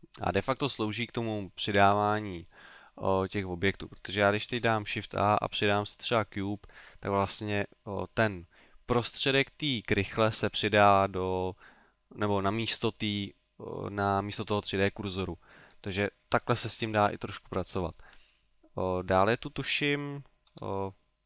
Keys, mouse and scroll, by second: 0.4-0.8 scroll down 3, 1.1 middle click, 1.7 middle click, 4.4 shift+a, 6.9 middle click, 17.4 middle click, 18.3 right click.